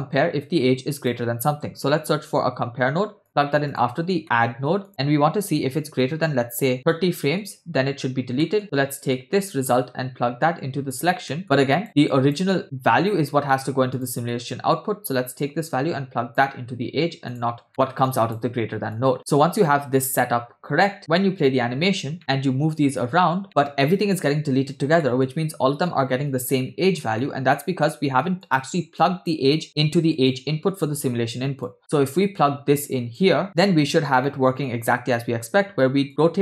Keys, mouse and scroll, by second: 0.3 shift+a, 4.2 middle click, 4.2-4.8 scroll up 1, 4.9-7.3 drag, 8.4 middle click, 9.2 click, 9.6-10.9 drag, 11.3 middle click, 11.5 click, 12.1 click, 13.5 middle click, 13.9 click, 14.3 middle click, 15.4-16.5 drag, 17.4 drag, 17.7 middle click, 18.1 click, 18.9 click, 20.0 scroll down 2, 21.1 space, 22.2 middle click, 23.4 click, 25.0 middle click, 25.3-25.6 scroll up 2, 26.0 middle click, 27.1 scroll down 2, 27.2 middle click, 28.5 click, 29.1 click, 30.1 click, 30.6 scroll down 1, 31.7-33.2 drag, 33.4 click, 34.3 middle click, 35.4 space, 36.1-36.4 drag.